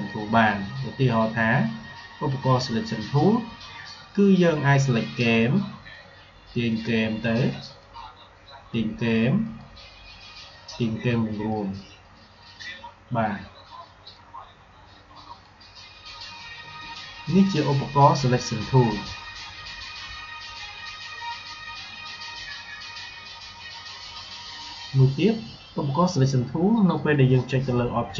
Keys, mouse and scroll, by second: 4.9-13.9 drag, 7.9-8.6 drag, 14.0-16.6 drag, 26.8 click.